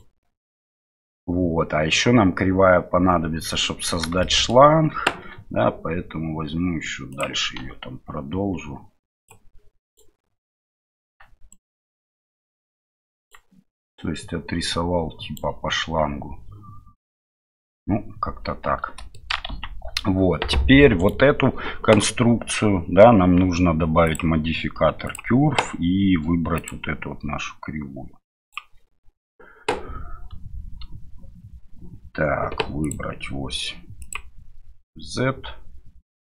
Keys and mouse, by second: 4.2 shift+middle click, 5.2 e, 9.8 right click, 11.5-13.3 right drag, 13.9-16.2 right drag, 19.5 Tab, 21.0 right click, 24.1-25.2 drag, 26.6 click, 32.8-34.1 drag.